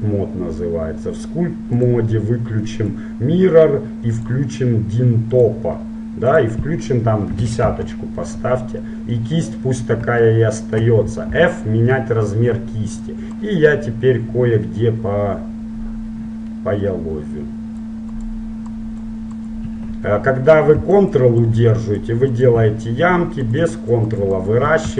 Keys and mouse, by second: 1.9-8.6 drag, 9.9-11.7 middle drag, 11.5 f, 13.3-15.3 drag, 18.3-24.9 drag.